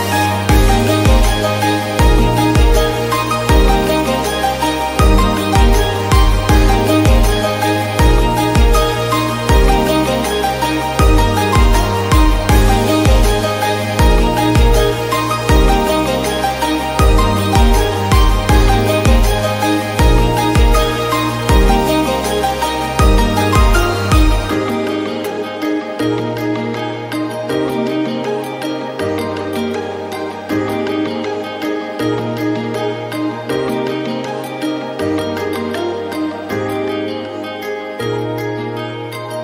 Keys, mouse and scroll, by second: 0.3 ctrl+r, 1.6 ctrl+r, 3.2 Tab, 3.4-3.8 scroll down 12, 3.8 shift+middle click, 3.9 scroll up 1, 4.2-5.2 shift+middle drag, 5.2 ctrl+s, 5.4 alt+z, 5.6 scroll up 2, 5.8-15.4 shift+middle drag, 15.4 Tab, 15.6-15.9 scroll down 4, 15.9 click, 16.8 alt+z, 16.9 click, 17.4 scroll up 2, 18.3 shift+middle click, 18.6 click, 19.8-20.1 scroll up 1, 20.1 r, 20.6-20.9 scroll down 10, 20.9 Tab, 21.1 scroll, 21.1 scroll up 1, 21.3 shift+middle click, 21.6 alt+z, 21.7 scroll down 1, 21.8 3, 21.9 shift+middle click, 22.1 click, 22.4 ctrl+s, 25.0 scroll down 1, 25.2 scroll up 1, 25.4 shift+middle drag, 25.6 click, 25.7-26.8 scroll up 1, 26.8 ctrl+a, 27.6 click, 27.9 ctrl+a, 28.7 scroll down 4, 28.9 shift+middle click, 29.1 click, 29.6 shift+middle click, 29.8 click, 30.4-34.5 drag, 34.5-35.1 scroll up 5, 34.8 Tab, 35.1 shift+middle click, 35.8 click, 36.2 alt+z, 36.8 g, 38.0 scroll up 1, 38.2 shift+middle click, 38.7 r.